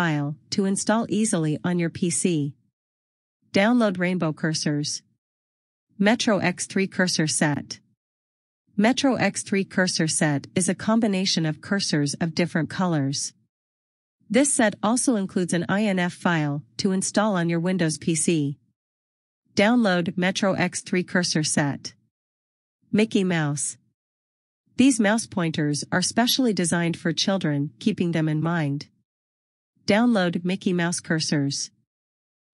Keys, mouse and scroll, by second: 25.4 click.